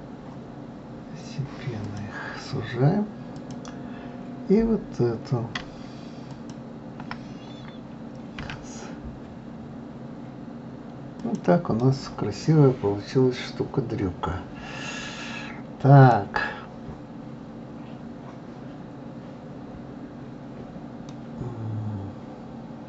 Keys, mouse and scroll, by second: 3.3 click, 6.3 alt+click, 8.4 s, 11.7-14.9 middle drag, 16.6-18.4 scroll down 2, 19.8-20.5 scroll down 1, 20.5-21.1 scroll up 1, 21.1-22.8 middle drag.